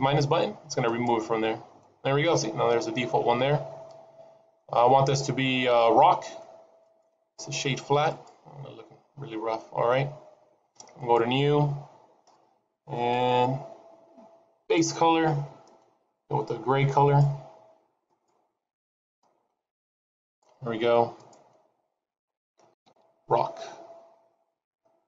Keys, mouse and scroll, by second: 0.8 click, 2.5-3.1 scroll up 2, 3.1-3.8 scroll down 3, 4.2 scroll up 1, 4.5 middle click, 6.8 right click, 10.9 click, 14.7 click, 17.0 click, 18.1 click, 21.1 click.